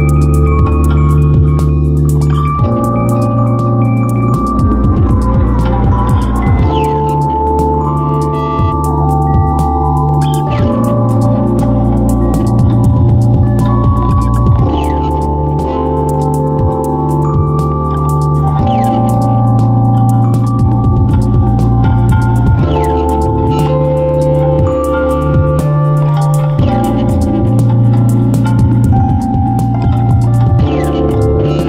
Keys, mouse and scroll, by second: 7.0 m.